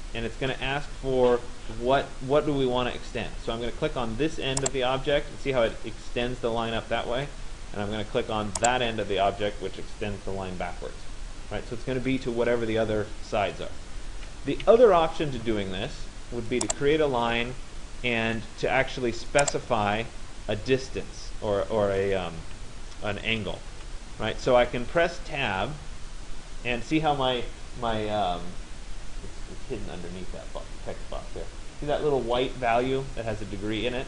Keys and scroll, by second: 14.3 Escape, 23.3 Tab.